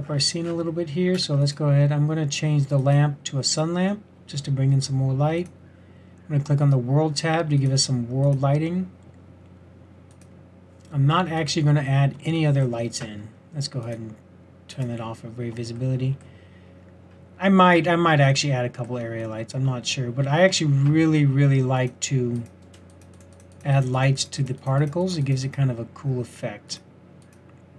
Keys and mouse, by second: 14.7-27.7 drag.